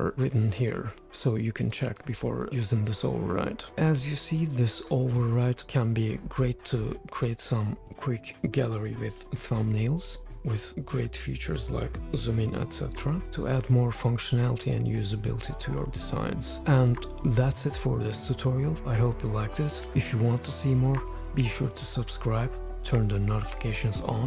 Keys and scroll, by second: 6.7 Right, 7.8 Right, 10.1 shift+4, 10.3 shift+4, 10.4 space, 11.9 shift+4, 12.1 shift+4, 12.7 -, 15.1 Right.